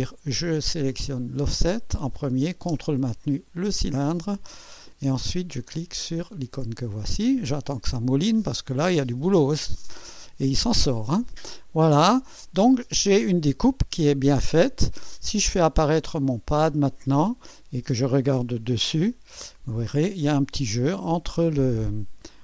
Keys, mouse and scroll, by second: 0.9 click, 3.6 ctrl+click, 6.1 click, 6.1 typing, 11.7-14.1 drag, 15.8 click, 16.3 space, 17.1-17.9 drag, 18.4 2, 19.1-19.4 scroll up 2, 19.7-20.0 scroll down 2, 20.5 scroll up 2, 21.1-21.9 right drag.